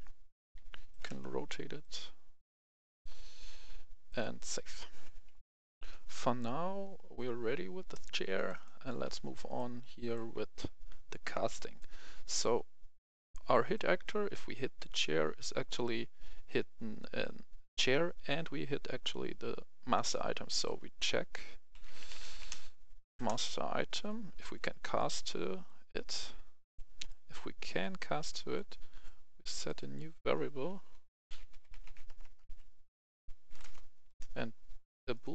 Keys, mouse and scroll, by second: 0.0-1.3 typing, 1.7-3.8 drag, 5.4 F11, 8.2 click, 9.2 right click, 11.6-14.7 drag, 21.6-22.7 typing, 23.1 Return, 23.9 click, 27.7 click, 28.2 right click, 29.5 click, 31.2-32.9 typing, 33.5 Return, 35.0-35.3 drag.